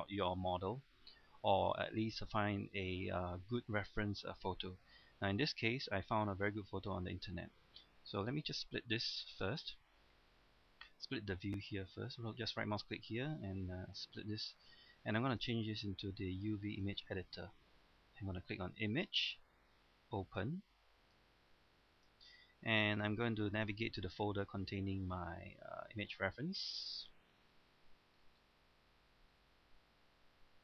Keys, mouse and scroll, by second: 8.5 right click, 9.3-23.0 drag, 25.7-28.4 scroll down 1, 28.4-29.7 scroll up 1, 29.7-30.6 scroll down 1.